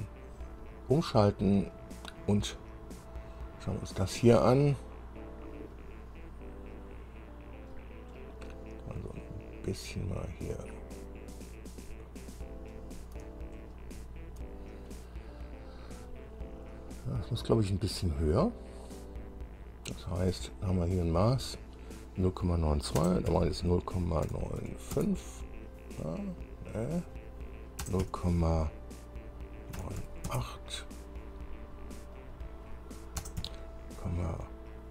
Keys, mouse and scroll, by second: 0.0 click, 1.1-1.9 scroll up 1, 2.7 scroll down 1, 3.7 scroll up 2, 4.3 scroll up 2, 7.9 scroll down 2, 8.3-12.7 drag, 12.9 scroll down 2, 13.8 shift+click, 15.9-16.2 scroll up 2, 21.3 click, 23.2 KP_0, 23.5 KP_Decimal, 24.4 KP_9, 24.8 KP_5, 25.1 KP_Enter, 26.9 click, 28.0 KP_0, 28.2 KP_Decimal, 29.9 KP_9, 30.2 KP_8, 30.4 KP_Enter, 32.3 click, 33.4 KP_0, 33.6 KP_Decimal.